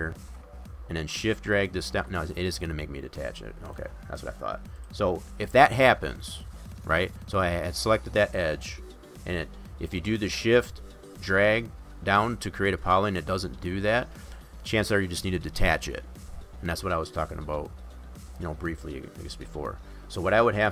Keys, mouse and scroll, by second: 1.3 shift+click, 2.5 click, 3.7 click, 4.8 click, 7.5 click.